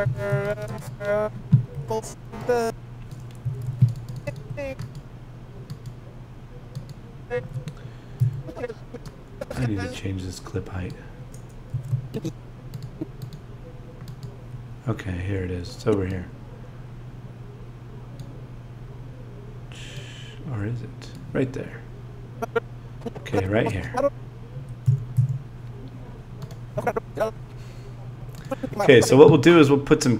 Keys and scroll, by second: 0.0 z, 3.4 z, 11.7 z, 24.9 z.